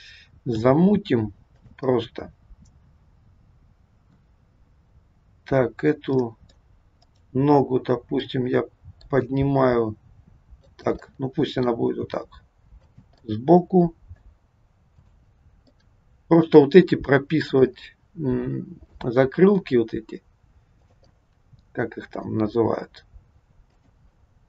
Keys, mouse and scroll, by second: 0.5 g, 2.0 middle click, 6.1 middle click, 7.0 click, 8.2 middle click, 9.1 g, 11.1 middle click, 11.9 g, 13.2 middle click, 15.0 click, 15.7 middle click, 16.5 r, 17.7 scroll up 1, 17.8 middle click, 18.9 scroll down 1, 19.1 r, 21.1 middle click, 21.1-21.5 scroll up 1, 22.5 r.